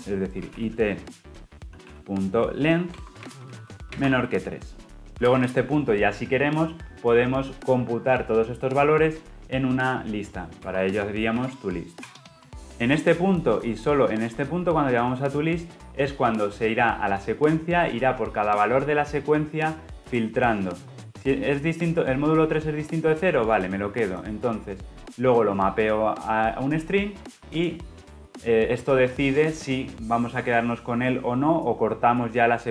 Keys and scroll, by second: 0.6 Return, 3.0 Return.